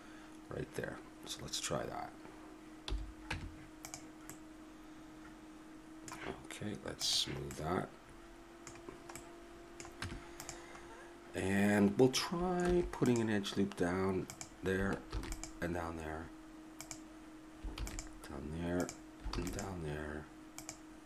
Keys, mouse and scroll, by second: 2.8 n, 3.3 Tab, 4.3-6.1 middle drag, 7.0 click, 7.7 middle click, 10.0 Tab, 12.6 ctrl+r, 15.1 ctrl+r, 17.7 ctrl+r, 19.3 ctrl+r.